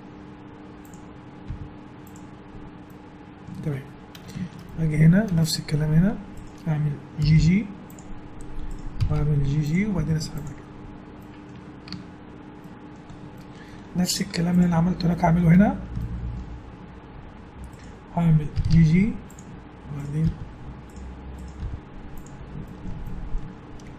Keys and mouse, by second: 1.5 g, 2.8-5.2 middle drag, 6.3 right click, 7.2 g, 8.7-10.6 right drag, 9.0 g, 9.9 g, 11.9 Tab, 14.2 Tab, 17.8 click, 18.5 g, 20.2 g, 21.6 g, 22.4 right click, 22.6 middle click.